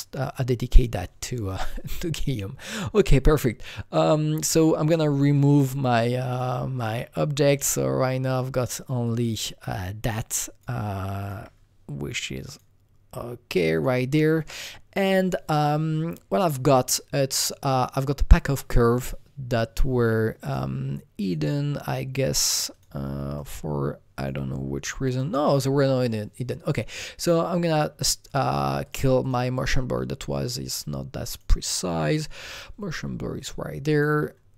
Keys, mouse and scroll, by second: 2.6 click, 5.3 click, 5.6 Delete, 5.9 click, 6.3 click, 6.4 Delete, 6.8 click, 9.6-12.5 drag, 11.4 Delete, 13.7 click, 15.5 click, 18.0 click, 20.4 click, 21.2 click, 22.7 click, 23.4 click, 25.1 click, 27.5 click, 28.3 click, 28.8 click, 29.2 click, 32.1 click, 32.5 click, 33.9 click.